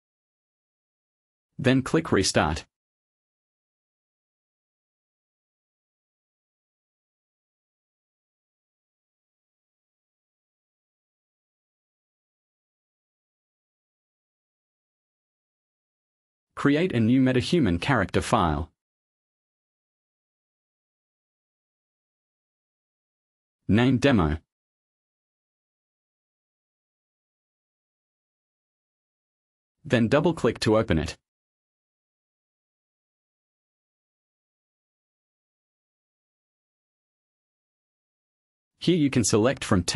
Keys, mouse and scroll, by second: 0.6-1.0 scroll up 1, 2.1 click, 12.7 click, 14.0 click, 15.1 click, 15.9 click, 17.3 right click, 20.9 click, 22.7 shift+d, 23.8-24.8 typing, 26.2 Return, 30.5 click, 38.1 click.